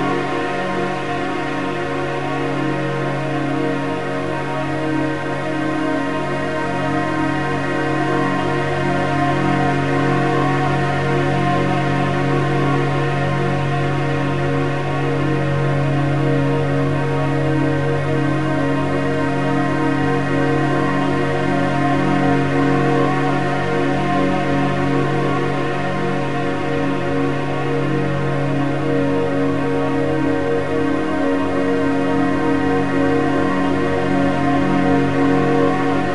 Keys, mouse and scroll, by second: 6.9 a, 7.1 a, 9.5-10.6 scroll up 1, 10.6 click, 11.9 click, 16.8 click, 18.2-21.3 drag, 25.9-28.9 drag, 29.2-30.8 middle drag, 30.8 click, 33.4 click, 33.9-36.1 drag.